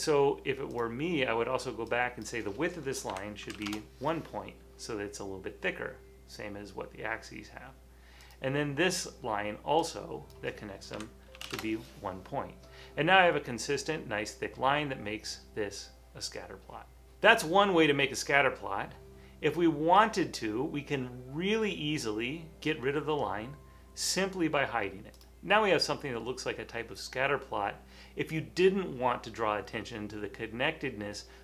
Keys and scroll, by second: 3.0-4.2 typing, 10.8-12.1 typing, 13.4 typing.